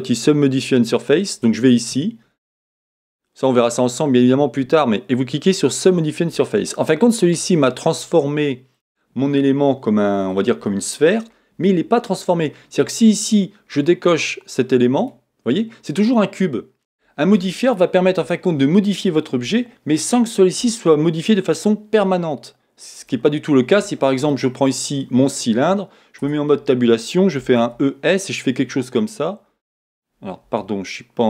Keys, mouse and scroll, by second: 5.9 click, 6.9 middle click, 8.8 click, 9.4 scroll up 1, 10.2-10.7 scroll down 1.